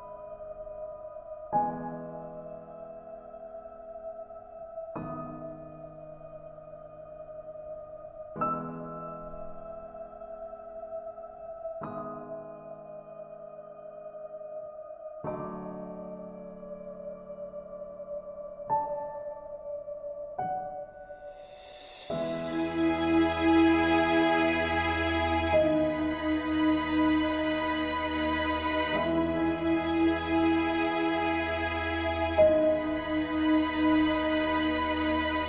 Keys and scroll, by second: 6.6 ctrl+a, 7.7 ctrl+c, 25.6 ctrl+v.